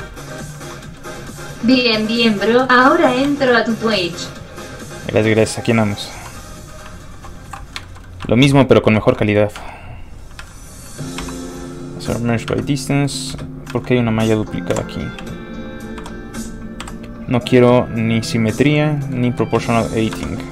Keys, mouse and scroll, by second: 0.2 shift+middle click, 0.3 middle click, 0.7 shift+middle click, 1.5 shift+middle click, 1.7 middle click, 1.7-2.1 scroll up 1, 2.1 middle click, 2.2 scroll down 1, 2.4 middle click, 2.8 alt+shift+middle click, 3.3 alt+shift+w, 7.5 alt+m, 7.9 shift+middle click, 8.1 middle click, 8.2 alt+shift+middle click, 8.8 alt+shift+middle click, 9.2 shift+middle click, 9.2-10.2 scroll up 3, 10.4 alt+a, 10.9 a, 11.2 q, 12.2 click, 12.5 Tab, 12.9 middle click, 13.3 Tab, 13.7 alt+a, 14.7 l, 14.8 l, 15.2 g, 16.0 Escape, 16.8 o, 18.6 click, 19.0 middle click, 19.3 shift+middle click, 19.6 middle click, 20.2 Escape.